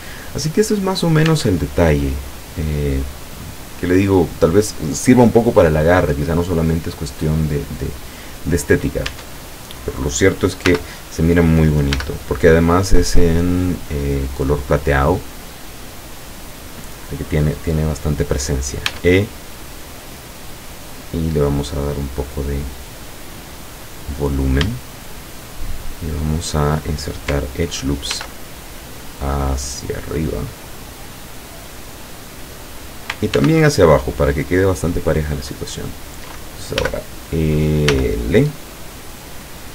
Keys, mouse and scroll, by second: 1.3 Tab, 6.3-7.7 middle drag, 7.9 scroll down 2, 9.1 Tab, 10.7 l, 12.0 l, 12.8-14.3 drag, 14.5-14.9 scroll up 2, 18.9 e, 23.6 click, 24.3-24.8 scroll up 3, 24.8 shift+middle click, 25.6 shift+middle click, 25.9-26.8 shift+middle drag, 28.1 ctrl+r, 28.7 ctrl+click, 32.7 click, 33.4 ctrl+r, 33.9 ctrl+click, 35.6 click, 36.9 l, 38.0 l, 38.9-39.3 scroll down 2.